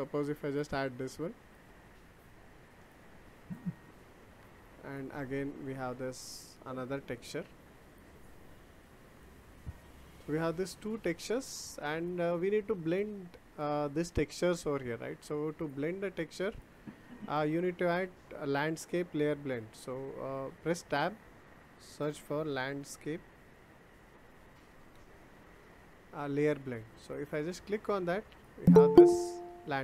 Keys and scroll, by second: 20.2 Tab, 24.5 BackSpace, 24.8 d.